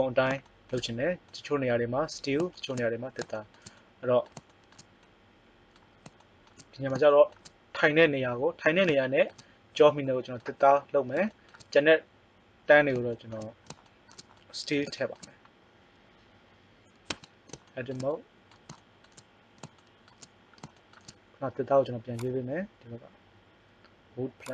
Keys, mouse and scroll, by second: 17.1 Tab, 17.8 middle click, 22.1-24.4 drag.